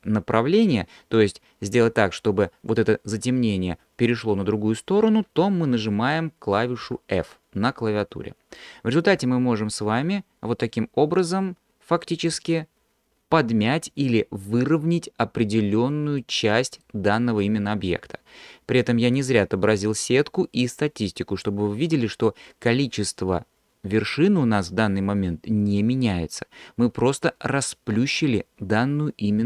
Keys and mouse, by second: 16.2 middle click.